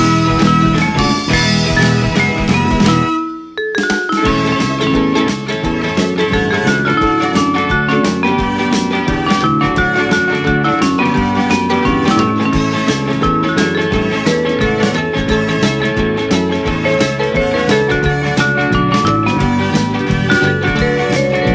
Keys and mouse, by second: 0.4 middle click, 1.0 g, 1.9 x, 3.8 click, 4.8 ctrl+r, 5.7 right click, 7.3 ctrl+r, 7.6 click, 8.1 right click, 9.2 click, 10.3 x, 11.1 click, 13.5 click, 15.2 click, 19.1 click, 20.1 click.